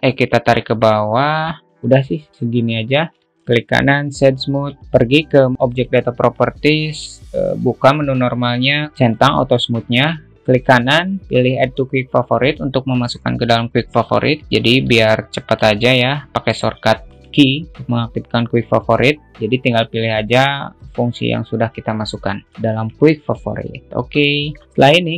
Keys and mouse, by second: 0.2-4.0 drag, 3.3 Tab, 3.3 alt+z, 4.0 right click, 6.1-9.6 drag, 9.6 click, 11.1-14.9 right drag, 15.3-16.1 alt+middle drag, 23.1-23.4 alt+middle drag.